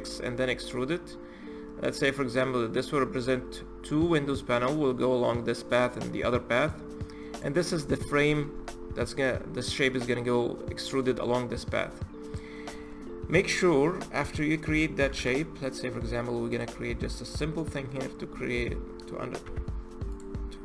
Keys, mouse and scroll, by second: 1.3-3.2 scroll up 5, 7.1 click, 7.4 scroll up 1, 7.5-10.6 scroll down 17, 10.6-11.5 middle drag, 11.5-12.0 scroll up 4, 12.0 click, 12.8-13.2 scroll down 4, 13.2 click, 14.0 click, 14.9 shift+a, 17.8 scroll down 2, 18.1 scroll up 1, 18.2-18.5 scroll down 2, 18.5-19.2 scroll up 1, 19.2 g, 20.1-20.6 scroll up 3.